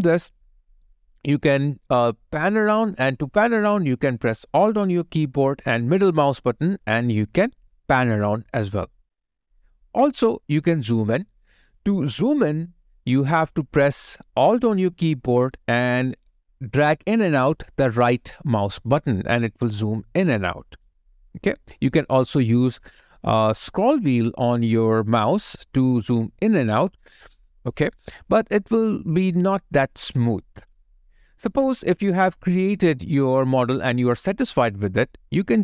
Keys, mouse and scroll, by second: 6.1 alt+middle click, 17.1 alt+right click, 25.2-26.2 scroll up 1, 26.2-27.3 scroll down 1, 27.3-28.2 scroll up 1, 28.2-31.6 scroll down 1, 31.7 alt+click, 32.7 alt+click, 32.8 alt+right click, 33.5 alt+middle click.